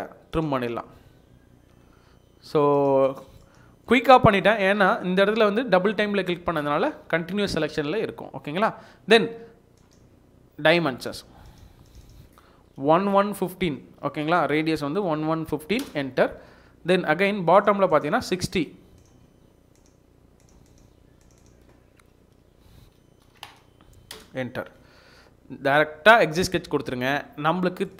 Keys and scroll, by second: 6.1 Escape, 6.6 Escape, 12.9-14.2 typing, 15.2 typing, 15.8 Return, 22.4-23.4 typing.